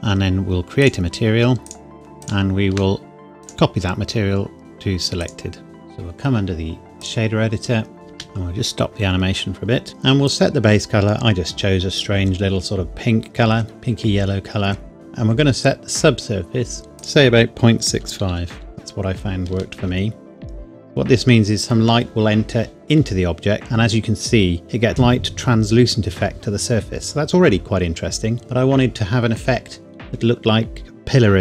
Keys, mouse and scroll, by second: 1.9 shift+click, 7.9 scroll up 1, 8.1 space, 10.3 click, 17.0 click, 17.9 KP_Decimal, 18.3 KP_6, 18.5 KP_5, 19.5 KP_Enter.